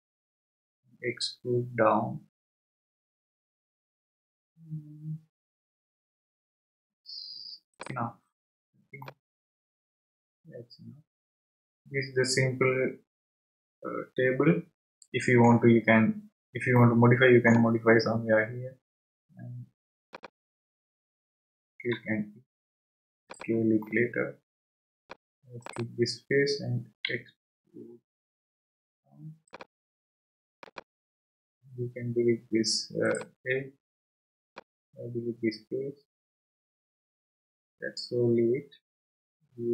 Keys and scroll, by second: 0.0 e, 21.9 e, 27.0 e.